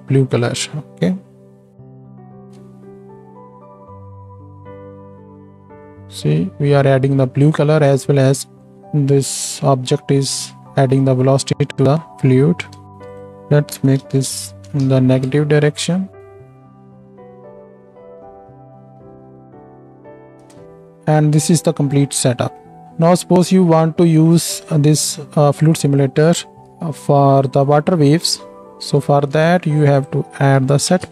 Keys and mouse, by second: 0.3 right click, 2.1 shift+Left, 2.1-5.2 shift+right drag, 2.4 space, 5.2-14.7 drag, 12.9 space, 13.1-14.7 right drag, 14.8 shift+Left, 15.3 space, 17.5-22.9 drag, 17.5-22.9 right drag, 20.5 space, 23.3 ctrl+space, 26.3-27.4 drag, 26.3-31.1 right drag, 29.1 shift+a.